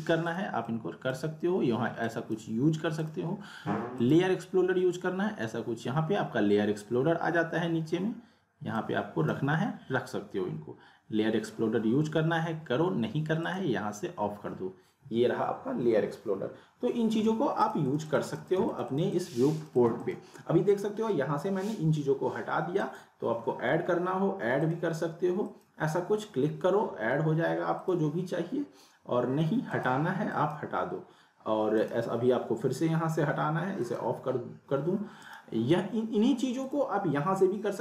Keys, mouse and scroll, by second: 0.2-1.2 drag, 8.7-9.4 drag, 13.4 click, 17.6 click, 22.8 click, 27.7 click, 35.2 right click, 36.6 click, 37.7 right click.